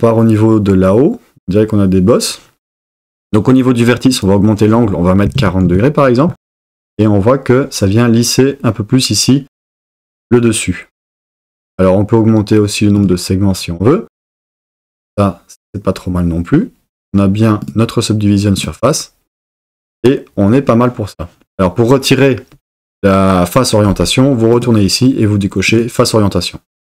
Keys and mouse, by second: 4.2-5.7 drag, 17.6 click, 18.6 click, 24.6-26.3 drag.